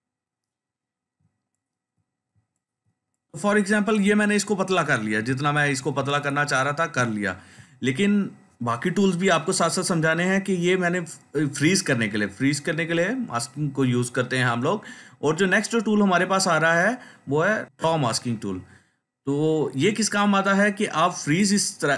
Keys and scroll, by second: 1.1-2.2 ctrl+space, 5.1 ctrl+space.